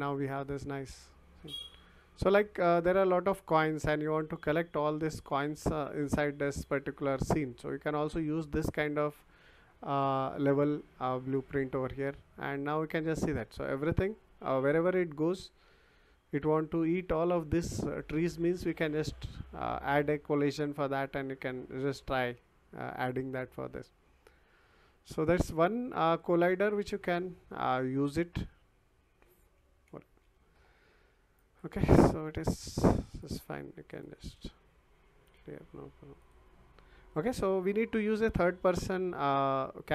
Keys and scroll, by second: 1.6 d, 3.3 s, 4.2 d, 5.0 w, 12.6 w, 13.6 d, 15.3 w, 16.4 d, 16.9 w, 18.6 s, 29.6 Escape.